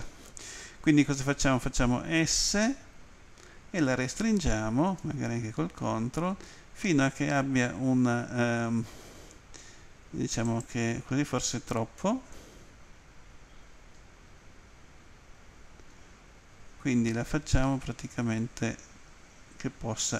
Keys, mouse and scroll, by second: 10.4 ctrl+click, 12.1 s.